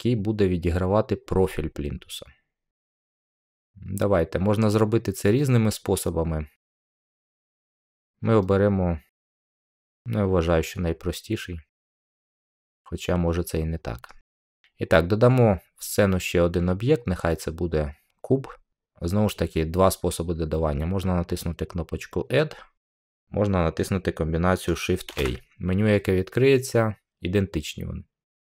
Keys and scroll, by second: 25.0 a.